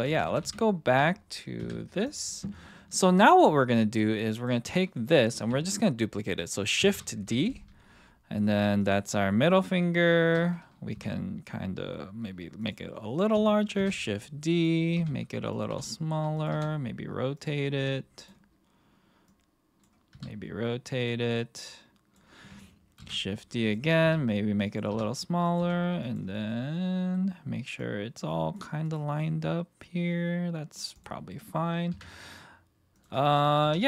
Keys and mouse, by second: 0.0 ctrl+z, 0.1 ctrl+z, 0.3 ctrl+z, 0.4 ctrl+z, 1.6 KP_1, 2.0 click, 3.6-4.5 drag, 6.8 shift+d, 8.8 click, 10.9 s, 12.6 click, 13.8 shift+d, 14.5 click, 14.9 s, 15.5 click, 15.7 g, 16.3 click, 16.5 r, 17.3 click, 17.8 g, 19.2-19.8 drag, 20.1 r, 21.6-22.1 drag, 23.0 shift+d, 23.6 click, 24.0 s, 24.6 click, 24.9 r, 25.4 click, 25.5 g, 26.4-27.1 middle drag, 27.8 click, 28.8 click, 29.2-30.8 middle drag, 31.3 middle click, 31.9 KP_1, 33.6 r.